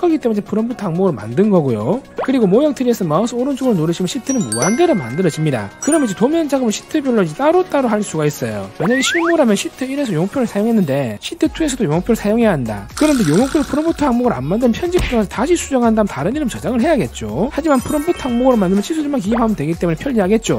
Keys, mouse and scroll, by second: 4.3 click, 5.5-7.2 typing, 7.9 click, 9.1 click, 9.3 click, 10.7 click, 10.9 click, 11.9 click, 12.1 click, 13.3 click, 13.6 right click, 17.5 click, 17.7 click, 19.1 click.